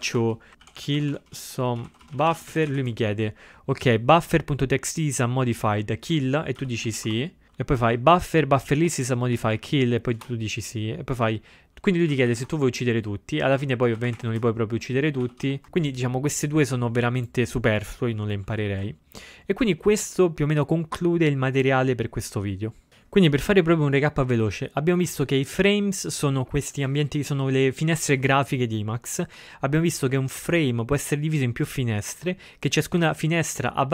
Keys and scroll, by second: 6.9-7.6 typing, 9.1-10.2 typing, 11.9-14.8 typing.